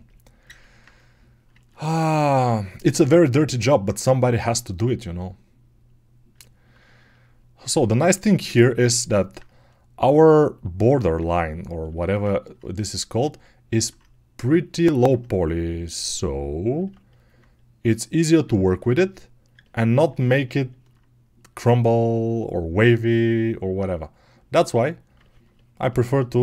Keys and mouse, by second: 2.3 alt+z, 8.5 alt+z, 12.9 right click, 13.2 alt+click, 13.3-14.6 right drag, 14.6-17.2 alt+drag, 17.2-18.3 right drag, 18.3-26.4 alt+drag.